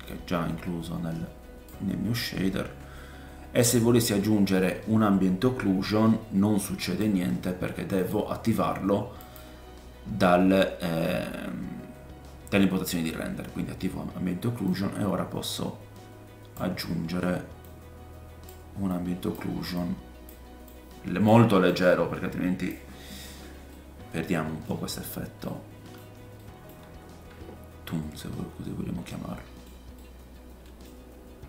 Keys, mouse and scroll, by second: 0.1 click, 1.0 middle click, 1.9-19.7 drag, 20.6 click, 23.2 click, 23.2 scroll down 2, 23.7 middle click, 24.9-25.4 scroll up 4, 25.4-29.9 middle drag, 27.8-29.1 scroll down 7.